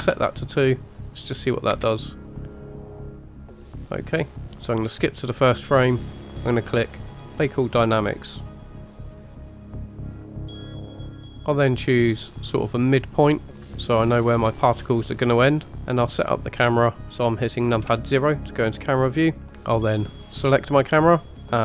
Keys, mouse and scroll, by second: 1.3 click, 1.8 space, 3.7-4.4 middle drag, 4.4-4.7 scroll down 4, 4.8 click, 7.3-11.3 drag, 11.3 middle click, 12.0-13.6 drag, 16.2-17.1 middle drag, 17.1 KP_0, 17.8 KP_0, 19.4 click, 20.5 click, 21.5-21.6 drag.